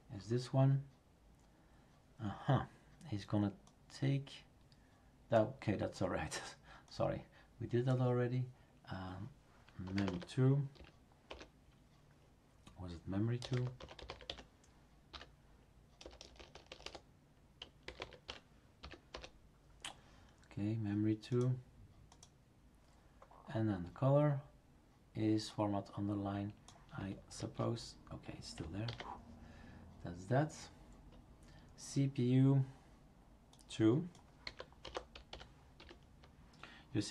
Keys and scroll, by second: 9.6-10.8 typing, 11.3 Return, 13.3-19.6 typing, 27.4 ctrl+v, 28.9 ctrl+s, 34.2-36.3 typing.